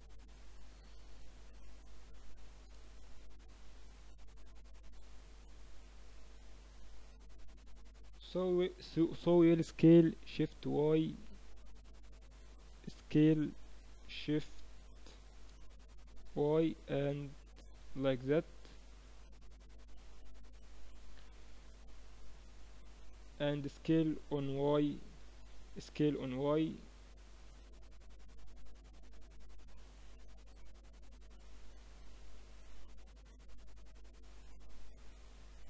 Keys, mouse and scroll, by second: 1.2 z, 2.4 z, 4.7-6.6 drag, 6.6-9.2 middle drag, 9.2 s, 13.4 s, 21.0-25.0 middle drag, 23.9 s, 25.5 s, 30.0 z, 30.4-32.3 middle drag, 32.3-34.2 drag, 34.2-35.6 middle drag.